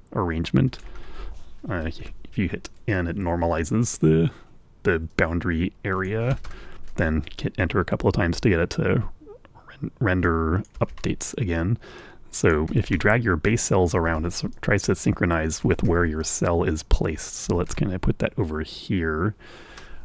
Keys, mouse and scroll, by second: 1.0-2.6 drag, 2.9 n, 6.5-7.8 drag, 7.8 Return, 11.7 click, 12.3 Return, 13.5 click, 14.1 Return, 14.8 click, 15.5 Return, 16.0-17.3 drag, 17.1 Return, 17.5-19.1 drag, 19.0 Return.